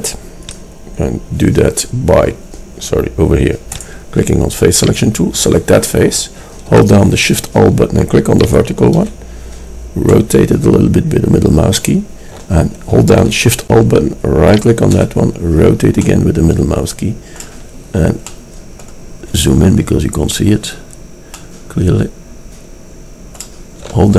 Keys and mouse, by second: 1.4 click, 2.4-3.8 middle drag, 4.9-8.5 middle drag, 8.5-14.5 drag, 20.5-22.7 drag, 22.7-24.1 middle drag.